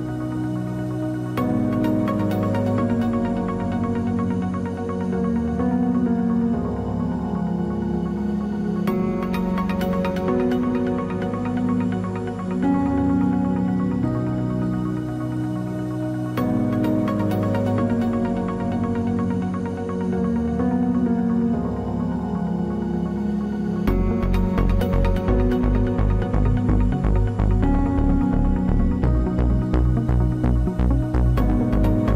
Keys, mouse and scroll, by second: 3.1-4.5 right drag, 4.2 KP_Decimal, 5.0-7.3 middle drag, 5.4 b, 5.9 g, 8.0-9.5 right drag, 8.2 b, 8.7 g, 11.0 ctrl+r, 12.4 right click, 13.0 KP_Decimal, 14.2 middle click, 14.8-16.7 drag, 15.7-17.5 right drag, 15.8 b, 16.8 click, 17.5-18.7 drag, 19.4-21.2 right drag, 19.7 g, 21.2-21.8 scroll down 1, 23.4 ctrl+r, 26.8 KP_Decimal, 28.2 middle click, 29.3-31.1 drag, 29.3 right click, 30.9-32.1 right drag, 31.5-32.1 drag.